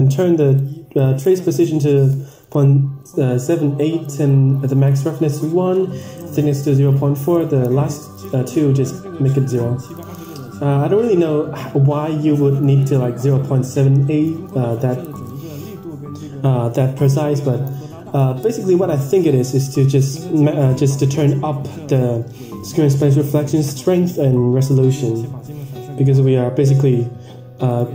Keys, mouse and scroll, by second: 1.0-2.6 drag, 3.5 click, 5.0-6.0 drag, 9.4 click.